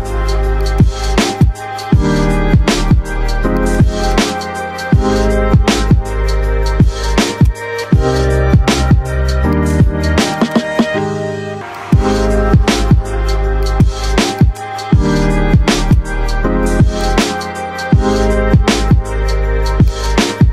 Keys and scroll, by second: 9.1 Delete.